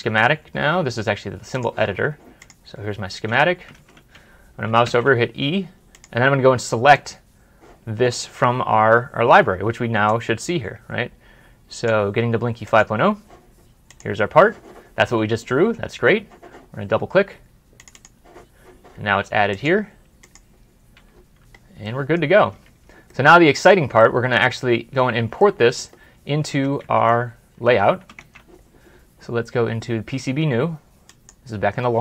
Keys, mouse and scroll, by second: 0.3 scroll down 1, 2.8 scroll down 1, 2.9 scroll up 1, 3.6 ctrl+z, 4.7 e, 17.8 double click, 20.6 double click, 20.8 scroll up 1, 21.0 scroll down 1, 21.7 middle click, 22.8 ctrl+s, 23.0 middle click, 24.8 scroll down 1, 25.3 middle click, 26.7 alt+Tab, 28.0 alt+shift+Tab.